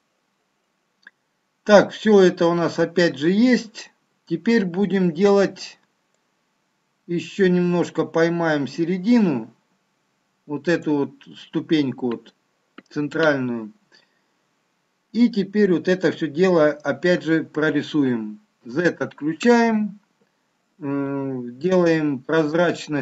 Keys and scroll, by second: 18.6 z.